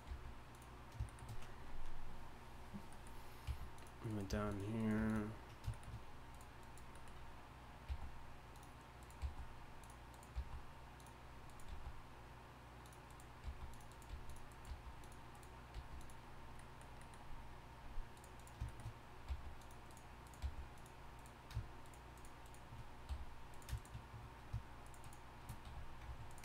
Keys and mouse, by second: 0.1 g, 1.1-2.9 drag, 3.4 g, 4.0 right click, 4.3 g, 4.8 right click, 5.0 g, 7.9 g, 9.2 g, 10.3 g, 11.7 g, 13.4 g, 14.1 g, 14.7 g, 15.7 g, 18.1 click, 19.2 click, 19.3 g, 20.4 g, 23.1 f, 25.6 f.